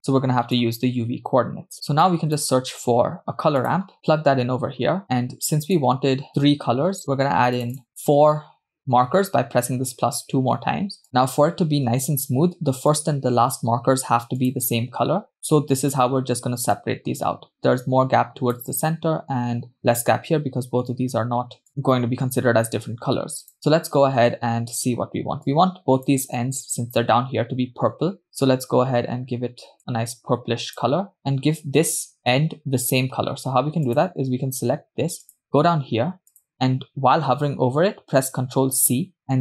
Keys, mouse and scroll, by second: 1.7 click, 2.0-2.5 drag, 3.0 shift+a, 5.0 middle click, 5.0-5.5 scroll up 2, 5.9 click, 7.9 click, 11.0-13.2 drag, 13.5 click, 14.7-15.1 drag, 15.3-16.4 drag, 17.1-19.0 drag, 21.7 click, 23.5 click, 25.9-26.6 drag, 28.5 click, 33.9 click, 35.6 click, 38.7 ctrl+c.